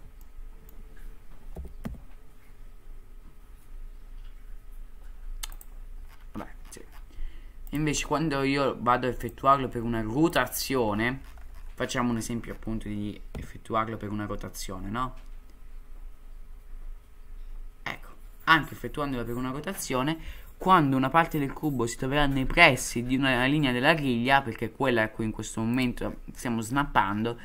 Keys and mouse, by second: 0.2-0.7 shift+middle drag, 1.5 g, 7.8-10.7 drag, 13.3 r.